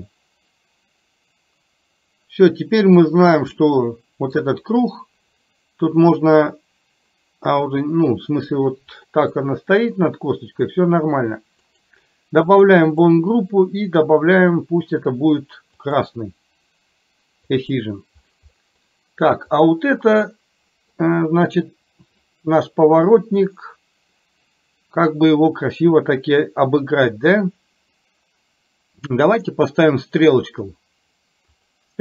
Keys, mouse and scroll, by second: 3.6-4.4 middle drag, 3.6 scroll up 1, 9.3 scroll up 1, 9.6-10.8 middle drag, 11.9 click, 13.2-16.1 drag, 18.6 middle drag, 20.4 middle click, 29.4-31.8 drag.